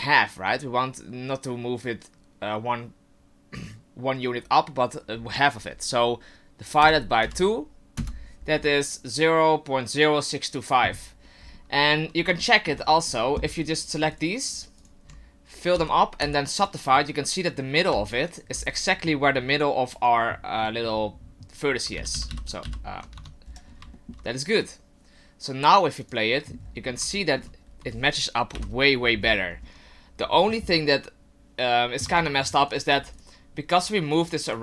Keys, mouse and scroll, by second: 11.4-12.3 scroll up 3, 12.4 shift+middle click, 12.8-13.8 scroll up 2, 13.8 right click, 14.1 shift+right click, 14.5 shift+right click, 14.8 shift+right click, 15.7 f, 16.2 w, 18.1 alt+right click, 19.9 right click, 21.9-22.3 ctrl+z, 22.6 ctrl+z, 23.1 Tab, 23.4-23.9 scroll down 8, 23.9 shift+middle click, 26.0 click, 26.6-27.1 scroll up 8, 27.2 shift+middle click, 27.6 scroll down 2, 28.5 KP_7, 29.2-29.8 scroll up 4, 32.0 Tab, 32.7 right click, 33.1 shift+right click, 33.8 right click, 34.1 shift+right click, 34.5 shift+right click.